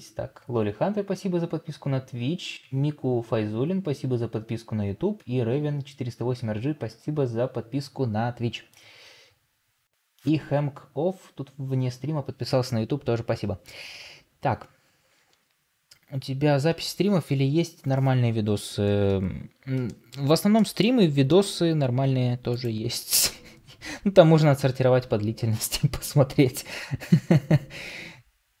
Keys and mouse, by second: 19.8 middle drag, 20.5 middle click, 21.2 shift+middle drag.